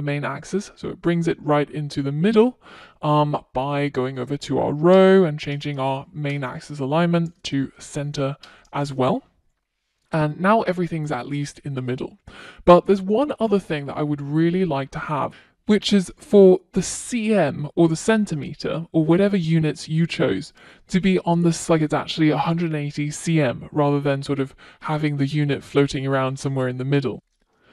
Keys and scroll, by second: 8.1 Return, 8.2 super+s.